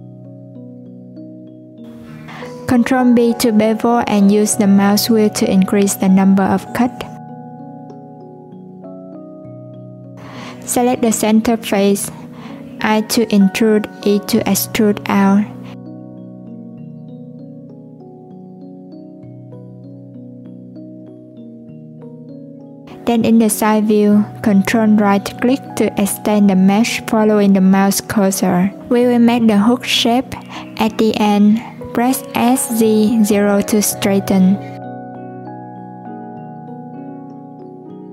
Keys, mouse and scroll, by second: 1.1-2.7 scroll up 1, 2.7-4.4 scroll up 1, 4.4-5.7 scroll up 1, 10.4 click, 17.4 click, 18.1-19.5 drag, 19.5 e, 27.6 ctrl+z, 27.7 ctrl+right click, 28.5 ctrl+right click, 32.8 s, 34.8 alt+click, 36.6 Tab, 37.4 ctrl+2, 38.0 Tab.